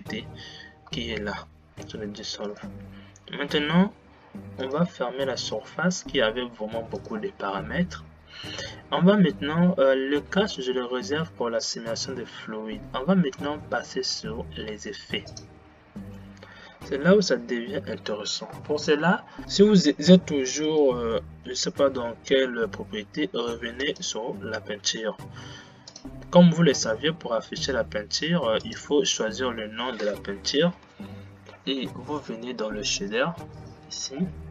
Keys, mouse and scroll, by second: 24.5 drag, 26.1-34.5 drag.